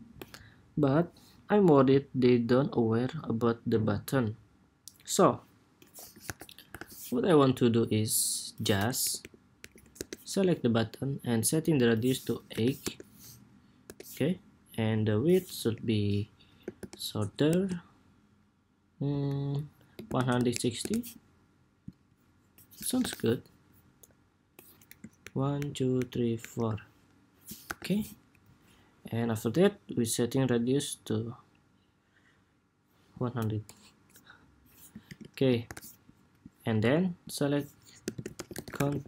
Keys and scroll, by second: 5.9 super+=, 6.4 super+-, 22.7 super+=, 27.4 super+-, 34.8 super+s, 35.4 super+=.